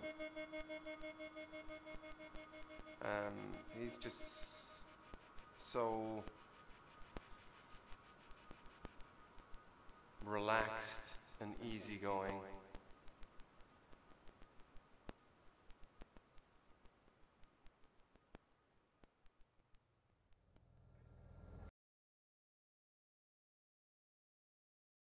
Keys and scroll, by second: 0.7 space, 0.8 e.